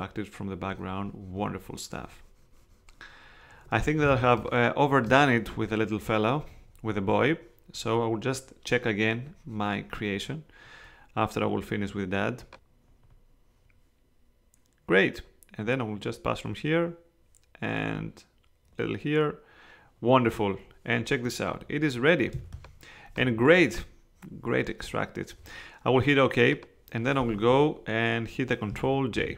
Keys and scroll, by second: 4.1 space, 22.3 space, 29.1 super+j.